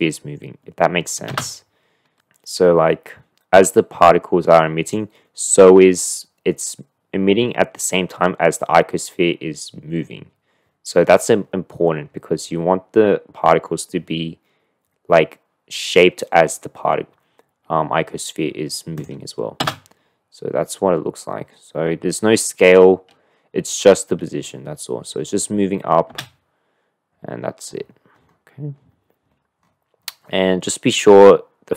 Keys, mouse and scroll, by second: 2.1 space, 2.6-5.4 drag, 19.1 click, 19.6 space, 26.6 space.